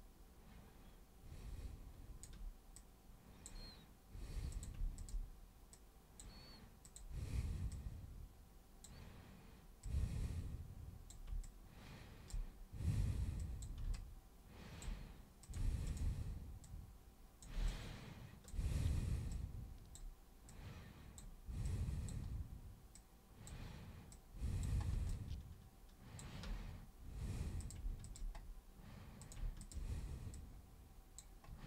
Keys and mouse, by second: 2.7 super+click, 4.5 super+click, 5.0 shift+super+click, 5.7 super+click, 6.8 super+click, 7.7-8.8 super+drag, 9.8-11.1 super+drag, 11.4 shift+super+click, 13.4 super+click, 13.9 alt+super+click, 15.4 super+click, 15.8 shift+super+click, 16.6 super+click, 17.7 alt+super+click, 19.3 super+click, 20.4 super+click, 21.6 super+click, 22.9 super+click, 24.1 super+click, 25.1-26.2 alt+super+drag, 27.6 super+click, 28.0 shift+super+click, 29.2 super+click, 29.6 shift+click, 30.3 click.